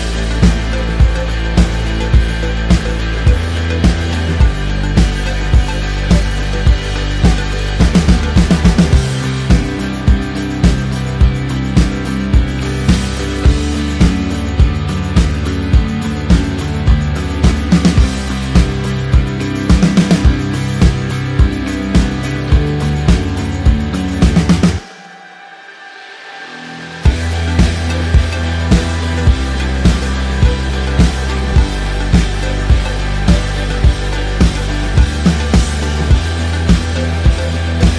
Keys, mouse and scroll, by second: 0.0 click, 5.3 KP_Enter, 7.3 click, 8.3 v, 11.1 shift+click, 16.2 ctrl+click, 17.5-19.6 typing, 21.0-21.8 typing, 23.0 click, 24.1 ctrl+z, 24.8 shift+click, 25.6 ctrl+z, 26.1 click, 27.4 KP_Enter, 28.4 click, 31.0 space, 33.9 click, 35.4 Return.